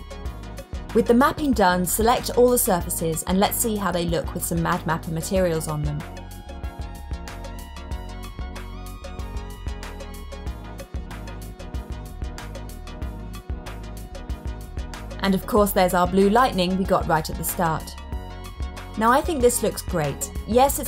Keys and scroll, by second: 2.0 super+a.